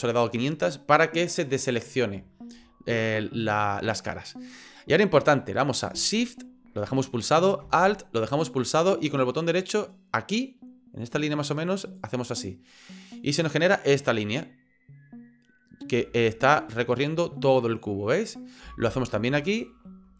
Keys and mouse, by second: 3.1-4.6 middle drag, 11.8 alt+shift+right click, 16.1-18.6 middle drag, 19.5 alt+shift+right click, 19.9 middle click.